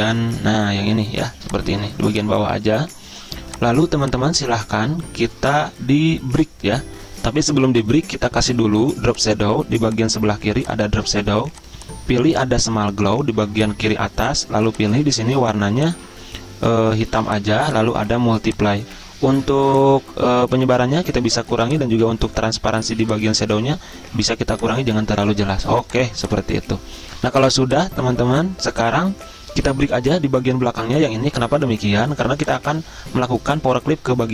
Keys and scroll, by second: 6.9 alt+Tab.